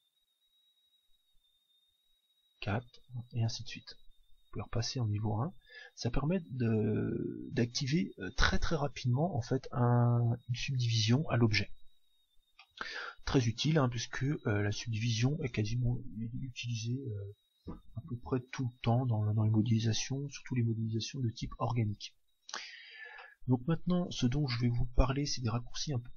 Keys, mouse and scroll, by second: 2.2 ctrl+4, 4.3 ctrl+1, 5.1 ctrl+2, 5.7 ctrl+1, 12.6-14.4 middle drag, 23.2-25.0 middle drag, 25.9 n.